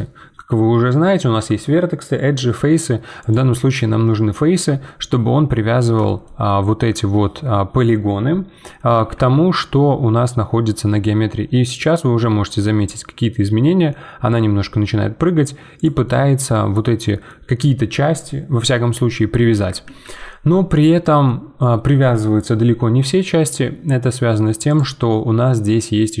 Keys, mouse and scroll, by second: 5.0 middle click, 5.7-6.0 scroll up 2, 6.0-8.9 shift+middle drag, 8.9 g, 16.0-19.8 middle drag, 19.8 ctrl+z, 21.2-24.3 middle drag, 24.6-26.2 drag.